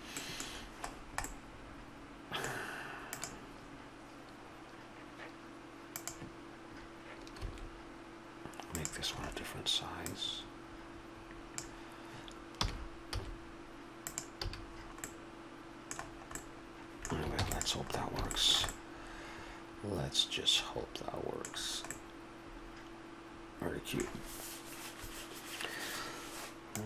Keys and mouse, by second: 0.6-3.2 middle drag, 7.4 s, 9.2 middle click, 10.1-12.0 drag, 12.6 r, 14.4 a, 14.6 middle click, 17.3 ctrl+s, 21.6-26.8 middle drag.